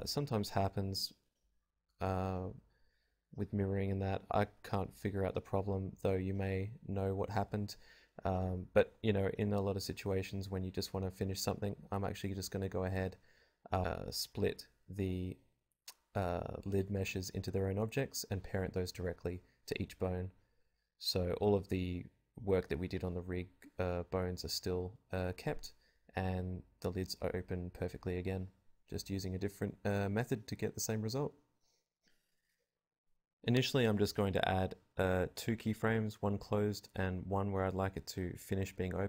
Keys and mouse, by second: 0.5 click, 1.9-3.4 drag, 5.2-6.5 drag, 6.5 ctrl+z, 8.5 ctrl+z, 8.6 ctrl+z, 10.2 click, 10.4 click, 10.4 Tab, 10.5-14.5 typing, 12.7 Tab, 15.6 ctrl+p, 17.1 ctrl+p, 18.2 ctrl+p, 19.7 ctrl+p, 21.0 middle click, 21.4 ctrl+z, 24.0 click, 26.4 i, 27.7-28.7 drag, 29.5-30.5 drag, 30.5 i, 31.9 click, 32.7 i, 33.7 click, 34.1 middle click, 35.4 Home, 38.1 v.